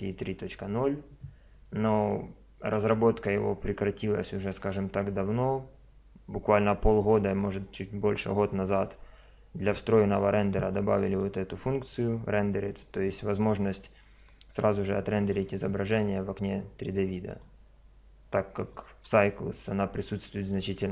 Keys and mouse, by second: 2.7 click, 4.3 click, 11.1 click, 17.3 click.